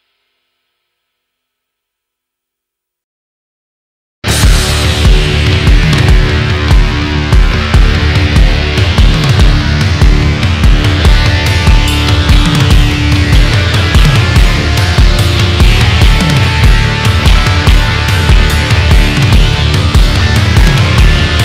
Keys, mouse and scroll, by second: 2.0 Tab, 2.5-3.0 middle drag, 3.0 KP_1, 3.7 Tab, 4.6 click, 6.5 click, 7.8 shift+click, 9.3 click, 10.9 middle click, 11.6 Tab, 12.0 scroll down 1, 12.1 KP_1, 13.6 Tab, 14.8 alt+click, 16.0 alt+click, 17.0 alt+shift+click, 17.8 click, 19.3 shift+middle click, 20.2 click, 21.3 click.